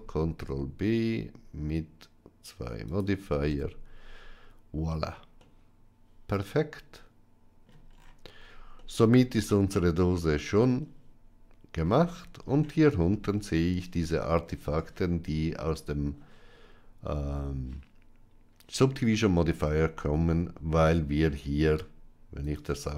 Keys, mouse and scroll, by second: 3.4 Tab, 5.3-7.6 middle drag, 8.7-11.7 middle drag, 19.4 Tab, 22.3 click.